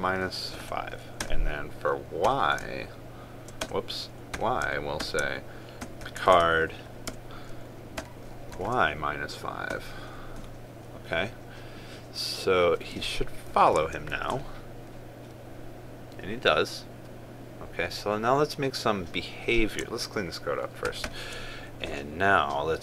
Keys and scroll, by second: 7.0 ctrl+space, 14.3 ctrl+s, 21.6 ctrl+a, 21.7 ctrl+i.